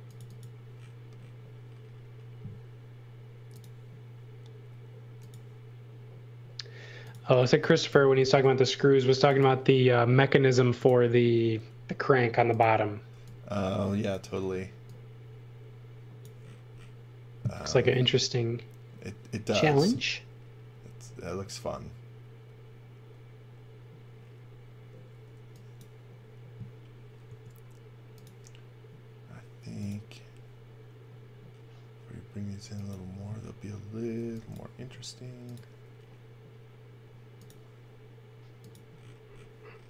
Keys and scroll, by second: 7.4 e, 8.2 a, 13.1 e, 27.2 a, 34.2 e, 34.8 a.